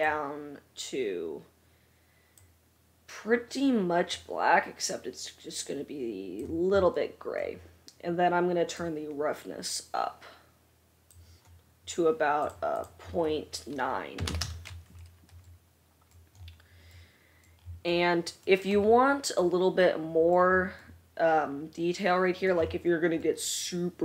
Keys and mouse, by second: 8.9-12.7 drag, 8.9-12.7 middle drag, 12.9-18.4 drag, 12.9-24.0 middle drag, 18.5-18.9 drag, 18.5-18.9 right drag.